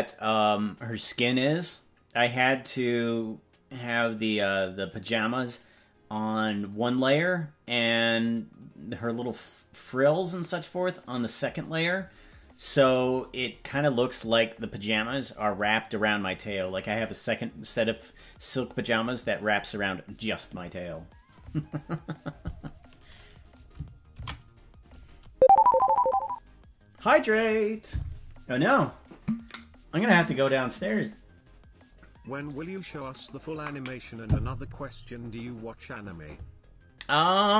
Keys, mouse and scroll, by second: 26.5 ctrl+s.